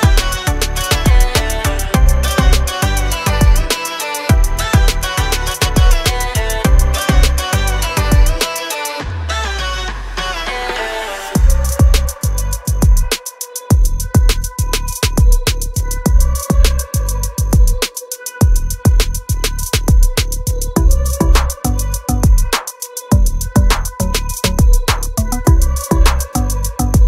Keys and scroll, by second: 0.3-3.9 typing, 0.6 Return, 2.1 Return, 3.7 Return, 13.1 l, 15.5 Escape, 15.7 r, 19.9 space, 20.7 m, 21.1 Up, 22.0-25.4 typing, 22.2 Return, 23.7 Return, 25.2 Return.